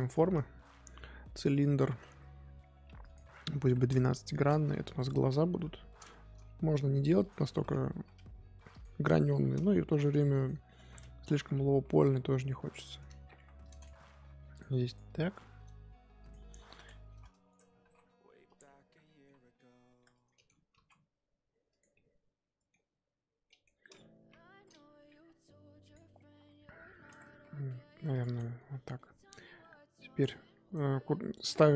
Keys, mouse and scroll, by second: 0.2 shift+a, 3.0-4.8 drag, 4.8 Tab, 5.5 KP_1, 7.2 click, 10.6 shift+middle click, 10.9-11.2 scroll up 2, 11.2 Tab, 11.4-11.9 scroll up 1, 11.9 s, 13.6 click, 14.7 click, 17.7 s, 18.7-19.0 scroll down 3, 19.0 middle click, 19.3 Tab, 20.0 middle click, 20.7 g, 21.9-23.8 middle drag, 23.8-24.2 scroll up 2, 24.2 KP_1, 25.1 g, 27.1 Tab, 27.3 r, 28.3 drag, 28.5 scroll down 1, 28.7-30.1 middle drag, 30.1 click, 30.6-31.7 right drag.